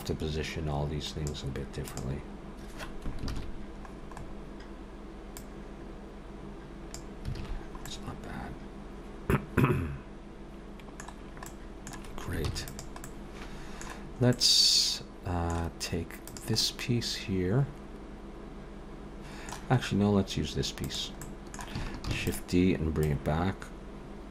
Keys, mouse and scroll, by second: 0.0 click, 1.9 click, 3.3 ctrl+KP_3, 4.2-4.6 scroll up 3, 5.4 click, 7.4 alt+a, 7.6 scroll down 2, 7.9 middle click, 11.2 scroll down 1, 11.5 middle click, 11.5-12.3 scroll up 1, 12.5 ctrl+s, 12.7 click, 13.0 middle click, 14.0-15.3 scroll down 2, 14.3 middle click, 16.3 click, 16.6 middle click, 19.8-20.4 scroll up 2, 20.8 click, 21.2 middle click, 22.1 shift+d, 23.1 click.